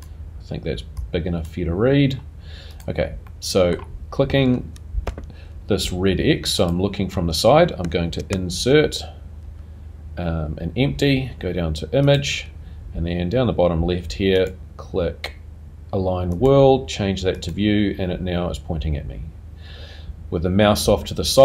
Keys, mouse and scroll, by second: 3.3 click, 3.3 middle click, 6.8 click, 6.8 n, 8.5 shift+a, 14.6 click, 17.5 click, 18.4 click.